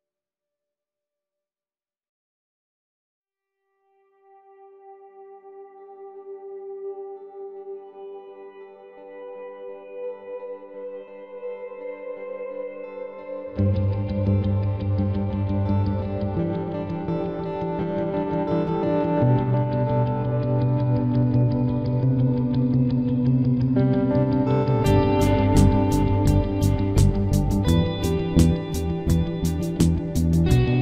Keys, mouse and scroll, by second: 1.9-5.0 middle drag, 15.0-17.0 middle drag, 17.0 ctrl+Tab, 18.3-20.5 middle drag, 20.8-22.4 right drag, 21.4 n, 21.9 n, 22.8 b, 23.3 g, 25.2-27.2 right drag, 26.0 c, 27.6-30.8 right drag, 28.3 c, 29.5 x.